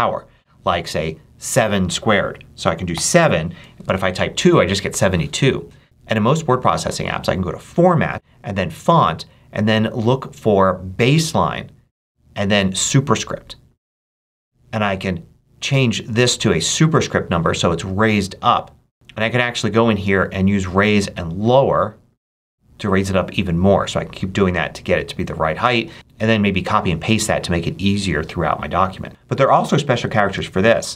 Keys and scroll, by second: 2.8 7, 29.1 BackSpace, 30.8 ctrl+super+space.